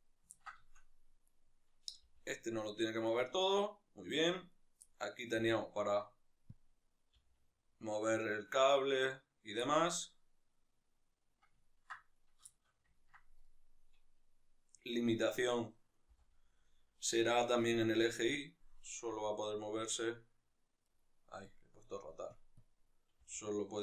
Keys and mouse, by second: 0.1-1.0 ctrl+shift+middle drag, 1.0-1.9 right drag, 1.9 g, 3.1 right click, 4.3-4.6 right drag, 4.6-6.5 middle drag, 5.2 g, 6.5 click, 6.7 right click, 7.0 g, 8.9 right click, 9.3-11.9 middle drag, 11.9 right click, 12.2-13.2 shift+middle drag, 13.2 right click, 15.8 n, 17.6 click, 18.9 g, 20.7 right click, 21.3 click, 23.0 g.